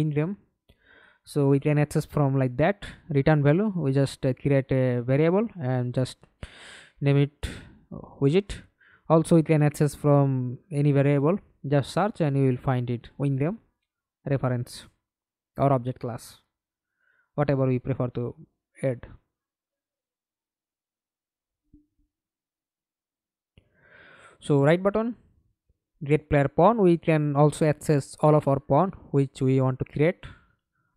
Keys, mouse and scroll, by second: 4.0-11.2 typing, 13.4 scroll up 1, 13.5-13.9 scroll down 3, 13.9 right click, 15.2 scroll down 3, 15.8 right click, 16.4-17.5 scroll up 7, 18.5 right click, 20.3 right click, 21.3 right click, 22.1-24.5 typing, 24.8 Return, 28.2 Delete, 29.2 right click, 30.7 middle click.